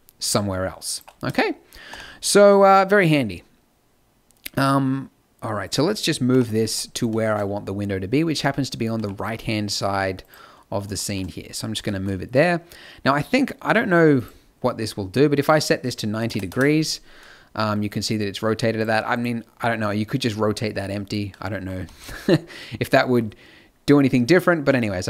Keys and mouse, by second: 0.9-5.4 drag, 1.9 n, 6.3 KP_7, 6.6 z, 8.9 g, 10.5 middle click, 11.0 middle click, 21.7 z, 24.7-25.0 middle drag.